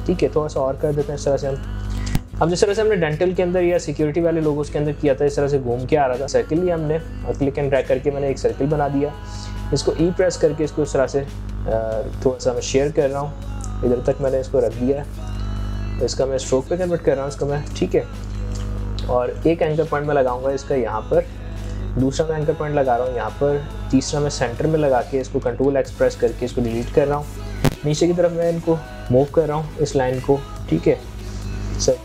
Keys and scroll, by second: 25.2 ctrl+x.